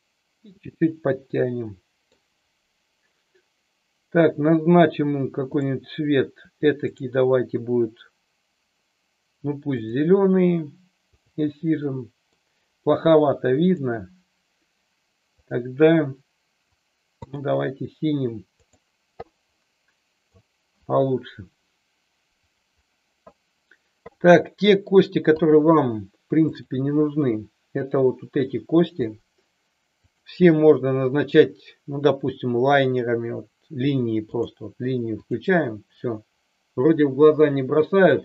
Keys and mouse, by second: 1.3-2.0 middle drag, 6.8-9.9 drag, 11.1 click, 11.8 middle click, 13.5 click, 15.4-17.3 drag, 18.7 click, 19.5-20.3 middle drag, 24.2-24.8 middle drag, 25.3-25.8 drag, 26.5 shift+click, 29.9-34.4 drag, 35.3 click.